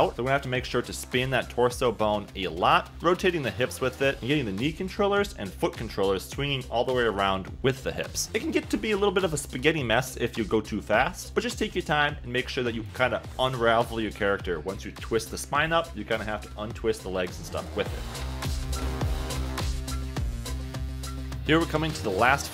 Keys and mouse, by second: 0.9 click, 1.1 shift+click, 2.2-4.0 typing, 5.1 middle click, 5.7 click, 6.7-8.3 typing, 10.4 middle click, 12.4-14.3 typing, 15.8-16.9 typing, 16.1 Escape, 16.1 click, 16.4 click, 21.5 g, 22.0 g, 22.3 click.